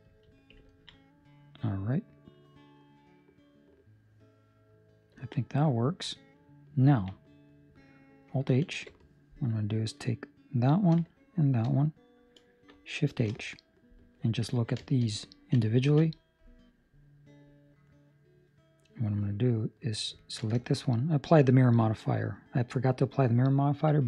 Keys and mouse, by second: 0.7 ctrl+middle click, 0.9 middle click, 5.1 ctrl+middle click, 5.3 middle click, 5.8 ctrl+middle click, 6.3 middle click, 6.8 ctrl+middle click, 7.2 middle click, 8.6 alt+h, 9.7 right click, 11.3 right click, 11.6 shift+right click, 13.3 shift+h, 13.5 middle click, 14.1 middle click, 14.5 ctrl+middle click, 14.6 ctrl+middle click, 14.9 shift+middle click, 14.9 shift+middle click, 15.0 middle click, 15.8 alt+a, 16.0 middle click, 19.5 right click, 20.1 ctrl+middle click, 20.5 shift+middle click, 20.7 middle click, 22.2 middle click, 22.5 shift+middle click.